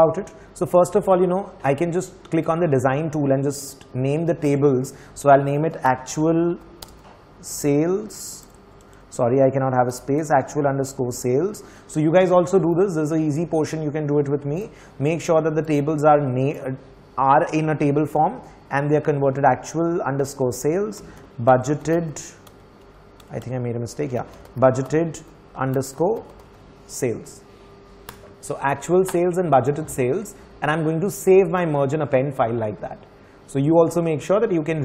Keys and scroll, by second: 5.3 ctrl+Up, 5.4-11.9 typing, 20.8-23.0 typing, 24.1-26.7 typing.